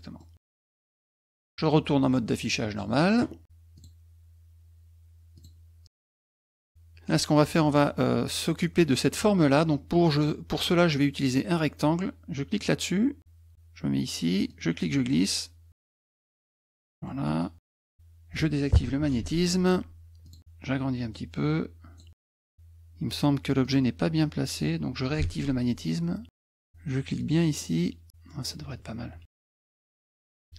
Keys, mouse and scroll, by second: 3.8 click, 5.3 click, 5.8 middle click, 7.6 click, 12.5 click, 14.5-16.8 drag, 17.0 middle click, 17.2 middle click, 17.6 middle click, 19.2 shift+ù, 20.2 click, 21.1 click, 23.6 click, 25.2 shift+ù, 26.3 middle click, 27.2-28.5 drag, 30.4 middle click.